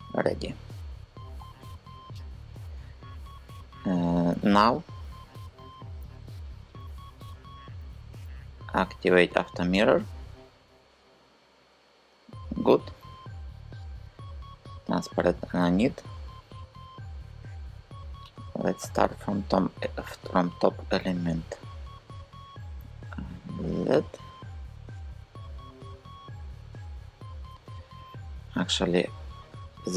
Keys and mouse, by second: 5.5 n, 7.4 a, 8.9 click, 9.3-10.5 middle drag, 20.4 click.